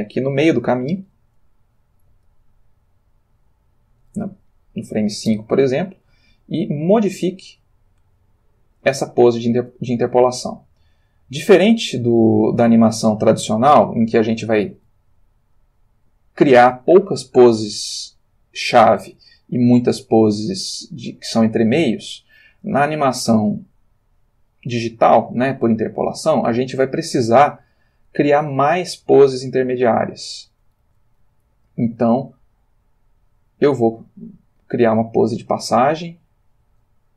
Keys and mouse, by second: 2.3-4.3 drag, 6.4-9.7 shift+middle drag, 10.9 click, 12.8-14.1 ctrl+middle drag, 15.4 click, 17.6 g, 21.7 click, 24.4 click, 26.6 click, 27.8 g, 30.3 click, 30.8 r, 32.1 g, 32.2 click, 33.8 click, 35.6 click, 36.9 r.